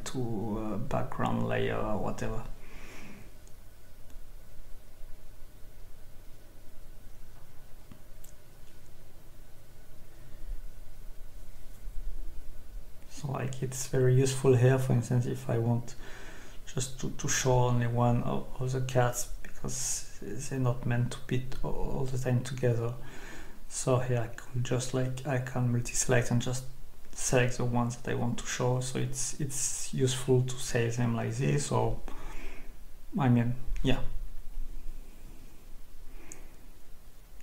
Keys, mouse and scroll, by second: 1.6 click, 3.0 click, 5.6 click, 6.8 Escape, 7.2-7.8 scroll down 2, 9.2 click, 10.0 click, 11.4 click, 12.8 click, 13.7 Escape, 15.0 scroll up 2, 15.7-16.8 scroll up 2, 17.3-18.1 scroll down 2, 21.0 alt+click, 22.4 click, 29.5-30.2 scroll up 2, 30.4-31.0 scroll up 2, 33.4-34.4 scroll down 2, 35.8 click.